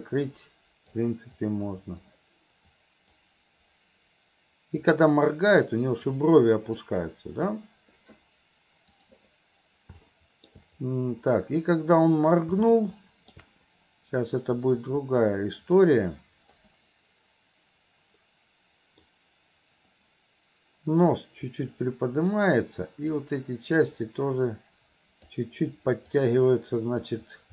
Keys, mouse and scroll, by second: 0.1 click, 1.4 click, 2.8 click, 4.9-6.2 drag, 6.8 click, 10.1 middle click, 12.7 middle click, 14.8-16.6 drag, 18.2 middle click, 21.2-22.4 drag, 23.2-25.3 drag, 26.2 click.